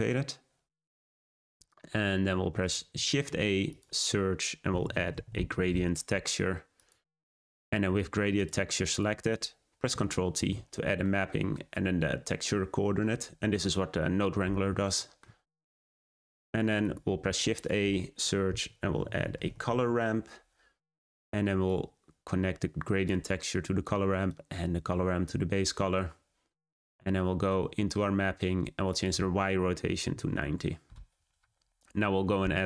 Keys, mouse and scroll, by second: 1.5-6.8 drag, 8.3-10.3 drag, 10.3 ctrl+t, 16.7 click, 19.8 shift+a, 21.6-23.0 drag, 24.2-25.2 drag, 30.3-32.6 drag.